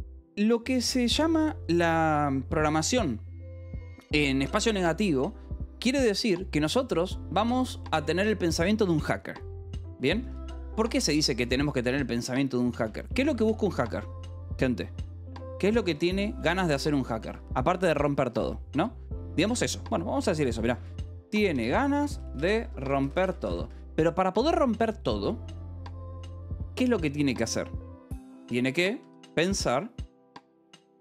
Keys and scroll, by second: 7.6 k, 7.9 o, 9.2-12.8 typing, 11.4 Escape, 12.4 Escape, 13.2 Escape, 15.4-18.3 typing, 19.8-23.9 typing, 28.5-29.6 typing, 30.7-31.0 typing.